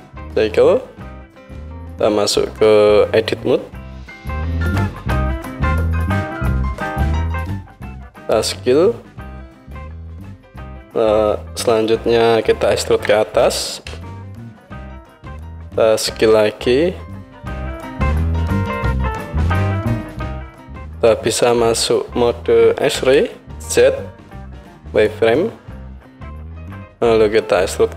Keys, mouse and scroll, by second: 0.1-10.4 drag, 0.1 shift+a, 4.4 Tab, 6.8 s, 10.4-27.9 middle drag, 12.9 e, 16.2 s, 23.0 z.